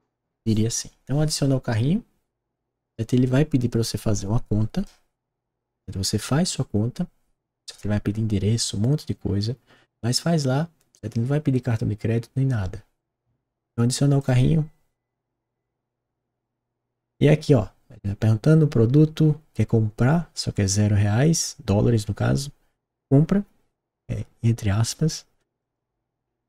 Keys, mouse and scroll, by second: 14.1 click, 19.2 middle click, 25.5 click.